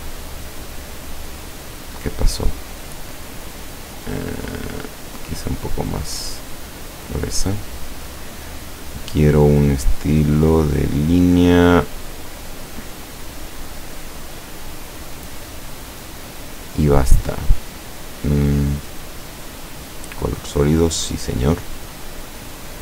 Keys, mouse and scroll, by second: 1.4 click, 4.1-4.4 scroll up 1, 5.5 scroll up 1, 6.6 scroll up 1, 7.8 click, 12.8 click, 13.9 click, 17.2 click.